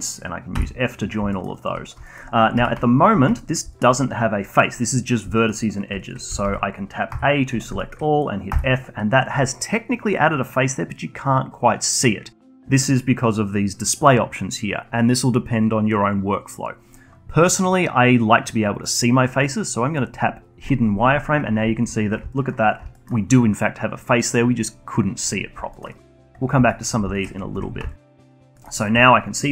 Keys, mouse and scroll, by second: 0.5 f, 1.3 alt+middle click, 1.5 alt+click, 2.0 alt+middle click, 2.5 a, 3.1 a, 3.7-5.4 alt+drag, 5.4 alt+middle click, 6.0 alt+click, 6.3 a, 6.4 a, 7.1 a, 7.8 alt+middle click, 8.5 f, 20.6 click, 22.3-22.9 alt+drag, 22.9-25.9 alt+middle drag, 25.9 alt+click, 26.7 alt+middle click, 27.1 alt+click, 27.5 2, 27.9 alt+click, 28.5 alt+middle click, 28.7-29.5 alt+drag.